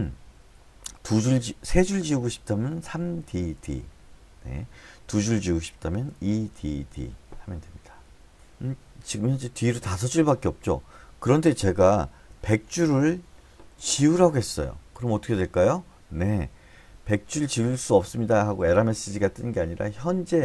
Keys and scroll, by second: 3.2-3.6 typing, 6.5-6.9 typing, 12.5-14.6 typing.